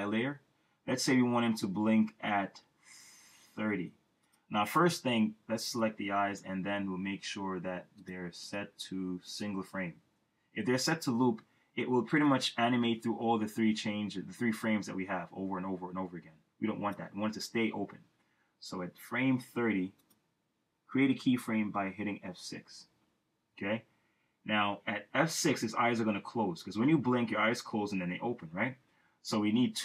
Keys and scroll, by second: 22.8 F6.